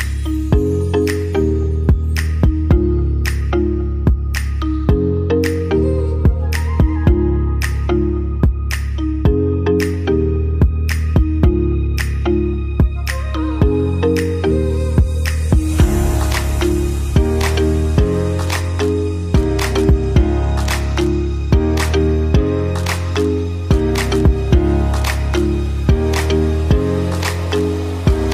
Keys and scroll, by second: 26.6 space.